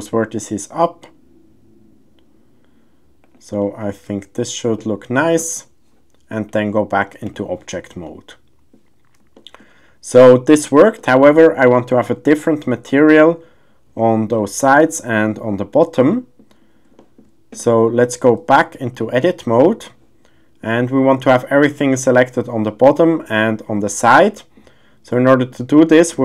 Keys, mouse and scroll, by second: 3.2 click, 3.6 middle click, 6.5-7.4 drag, 8.0-8.7 middle drag, 9.3 shift+middle click, 10.2 middle click, 11.0 shift+middle click, 11.8 middle drag, 14.4-14.7 middle drag, 16.1 middle drag, 17.0 shift+middle click, 17.2 shift+scroll, 18.9-20.3 drag, 20.7 middle click, 22.9 middle click, 24.2 shift+middle click, 24.5 shift+scroll, 25.3 shift+middle click, 25.8 middle click.